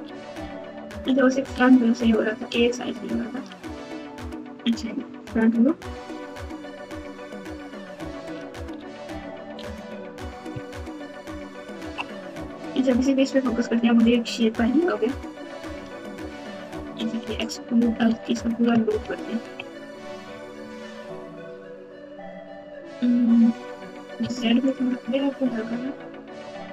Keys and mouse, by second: 0.0 ctrl+z, 0.2 ctrl+z, 0.4 ctrl+z, 0.5 ctrl+z, 0.7 ctrl+z, 1.5 ctrl+z, 1.7 ctrl+z, 1.9 ctrl+z, 2.4 ctrl+z, 2.7 ctrl+z, 3.1 ctrl+z, 4.1 KP_1, 5.2-6.7 ctrl+KP_2, 7.4-8.3 ctrl+KP_2, 8.7-9.3 KP_Subtract, 10.6-11.9 ctrl+KP_2, 12.6 KP_Divide, 15.9 alt+z, 16.7 click, 18.9-19.6 ctrl+KP_2, 20.6 e.